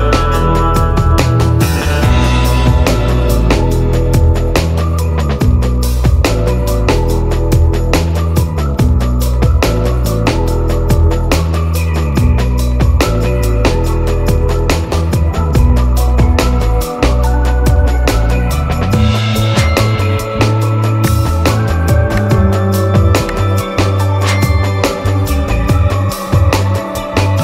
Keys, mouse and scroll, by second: 0.0-1.4 typing, 2.8 ctrl+click, 4.4-6.0 typing, 7.3-14.1 drag, 14.1 scroll down 1, 14.7-15.2 scroll up 1, 16.8-18.6 drag, 18.6-19.0 scroll up 1, 20.0-22.3 drag.